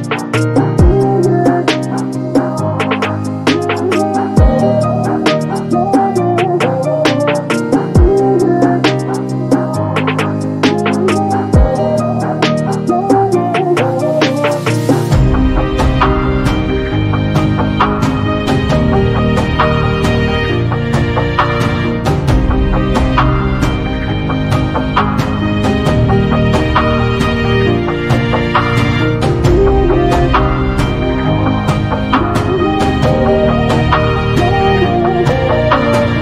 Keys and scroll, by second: 11.2 space, 17.4 l, 27.0 space, 31.1 space.